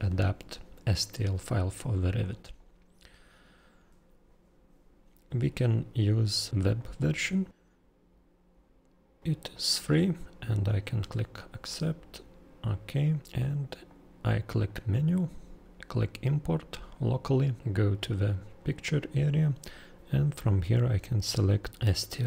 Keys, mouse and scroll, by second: 2.1 click, 6.7 click, 9.5 click, 10.6 click, 12.6 click, 13.9 click, 21.7 click.